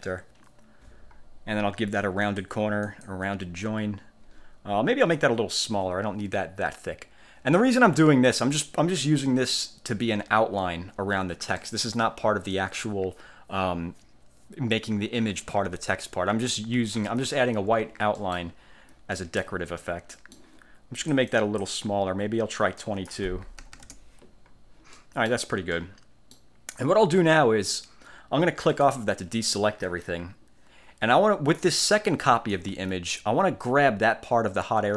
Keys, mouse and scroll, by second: 2.4 click, 3.0 click, 5.3 click, 8.5 middle click, 11.7 click, 17.0-17.3 ctrl+scroll up 2, 18.3 middle click, 18.5 ctrl+click, 18.6 ctrl+scroll up 2, 18.7 ctrl+scroll down 1, 19.3 ctrl+click, 19.7 ctrl+scroll down 1, 20.2 ctrl+middle click, 21.2 click, 22.9 click, 23.7 2, 24.0 Return, 25.1 click, 25.8-26.6 middle drag, 26.4 click, 28.8 click, 31.7-32.8 drag, 32.8 ctrl+z.